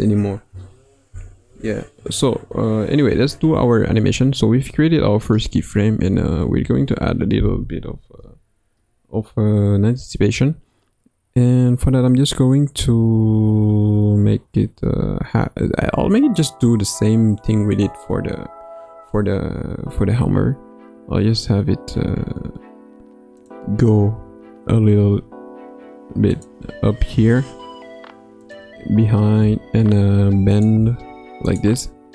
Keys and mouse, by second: 6.0 Right, 6.2 Right, 6.5 Right, 6.6 Right, 6.8 Right, 7.1 Right, 23.3 click, 24.1 g, 29.4 r, 31.4 click.